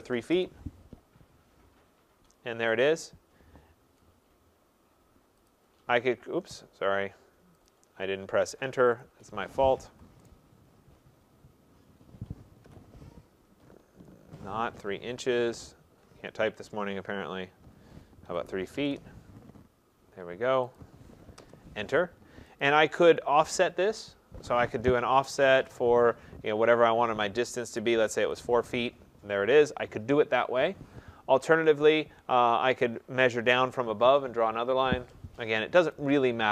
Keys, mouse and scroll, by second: 0.0-0.1 typing, 0.3 Return, 2.9 click, 5.5 click, 7.7 click, 9.1 click, 9.9 Escape, 10.3 right click, 12.7 Return, 15.5 ctrl+z, 18.3-18.9 typing, 20.8 click, 21.4 Return, 22.6 click, 24.9-25.6 typing, 27.4-28.2 typing, 36.0 click.